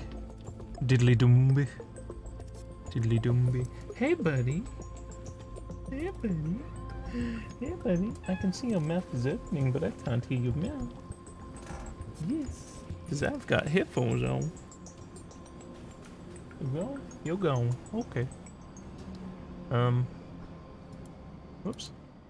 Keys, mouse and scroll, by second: 20.9 click, 21.7 click.